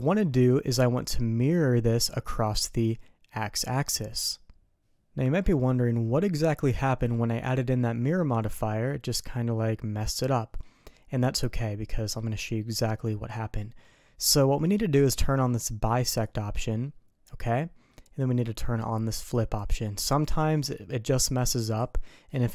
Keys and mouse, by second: 5.4 drag, 5.6-7.1 middle drag, 9.0-10.6 middle drag, 11.2 middle click, 13.8 middle click, 16.2 click, 17.4 middle click, 19.3 click, 20.1 middle click, 21.2 click, 21.6 click, 22.2 middle click.